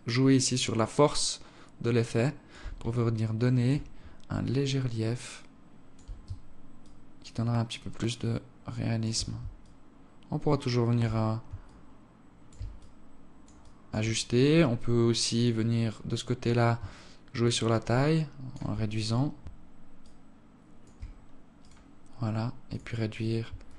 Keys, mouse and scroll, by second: 2.5 alt+click, 3.7-4.2 scroll up 3, 4.1 alt+click, 6.5 shift+click, 9.3 shift+click, 11.3 shift+click, 12.4 alt+click, 15.0 alt+click, 15.4-16.5 scroll down 12, 16.5 scroll down 17, 16.6 shift+click, 19.7 shift+click, 21.3 right click, 22.3 click, 23.3 shift+click.